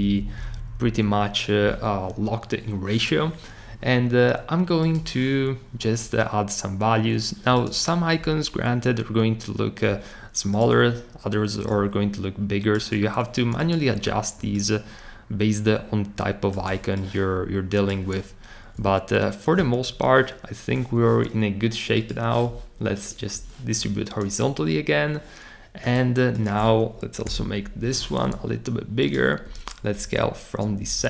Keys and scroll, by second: 0.0 Up, 0.2 Up, 0.4 Up, 0.5 Up, 27.2 super+k, 27.8-28.6 typing, 29.9 shift+Up, 30.8 Up, 31.0 Up.